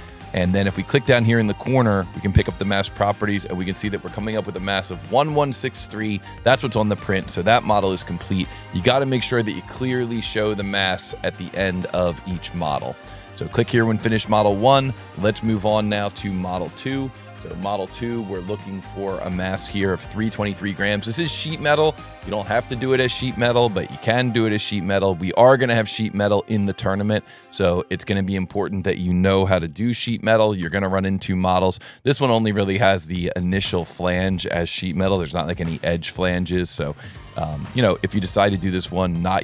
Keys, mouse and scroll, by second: 1.5 click, 2.0 click, 13.1 click, 14.9 click, 16.4 scroll up 1, 17.5 click, 18.8-22.9 drag, 24.1 click, 25.3 click, 26.8 click, 29.5 shift+q, 33.5 click, 33.8 s, 34.6 click, 35.9 s, 36.7 click, 37.7 click, 38.9 click.